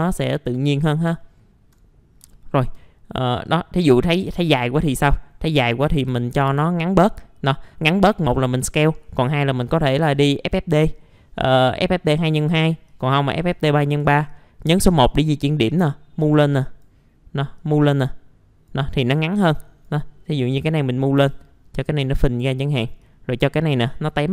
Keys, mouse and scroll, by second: 0.2 click, 0.9 scroll down 1, 1.2 alt+middle click, 2.3 alt+middle click, 3.1 scroll up 1, 3.4 click, 4.4 right click, 4.8 click, 5.6 middle click, 6.5 F4, 9.6 click, 10.6-12.4 scroll down 1, 12.4 right click, 12.9-19.2 drag, 20.6-24.3 drag, 21.2 r.